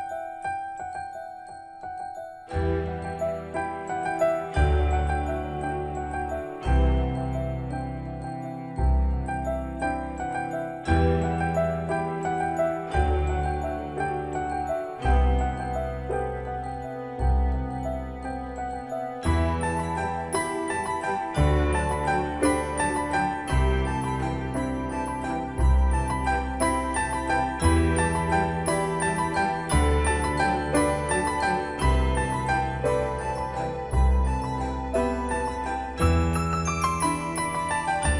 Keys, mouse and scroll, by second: 8.3 Escape, 9.8 x, 12.0 space, 12.7 click, 14.1 j, 15.5 click, 20.9 scroll down 1, 22.3 typing, 23.9 BackSpace, 26.3 click, 29.9 typing, 31.8 Return, 33.2 typing, 35.7 scroll up 1.